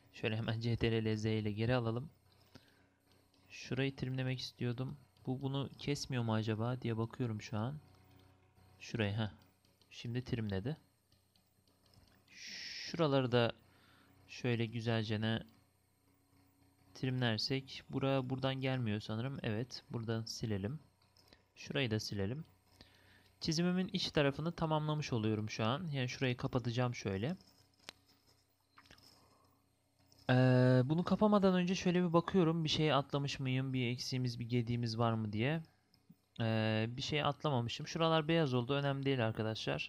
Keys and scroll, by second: 0.6 ctrl+z, 1.4 ctrl+z.